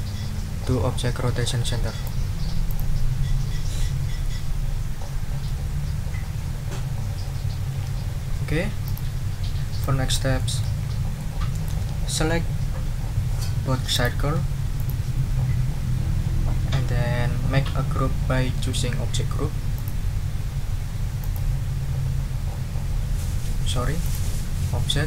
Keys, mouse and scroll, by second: 2.7 click, 8.8 click, 9.8 click, 10.8 ctrl+scroll up 2, 11.1 ctrl+click, 13.9 click, 14.7 shift+click, 19.7 click, 21.2 click, 24.0 click.